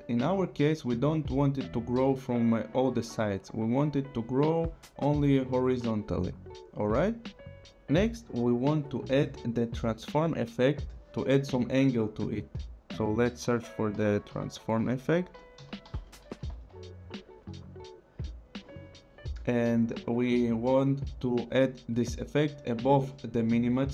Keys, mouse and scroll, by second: 4.0 click, 5.4 click, 10.2 click, 13.5-17.3 typing, 18.2 click.